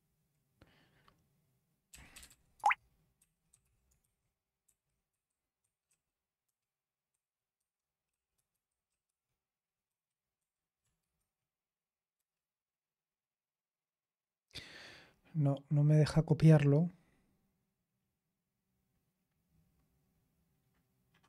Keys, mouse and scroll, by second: 1.6-11.1 typing, 12.1 Return.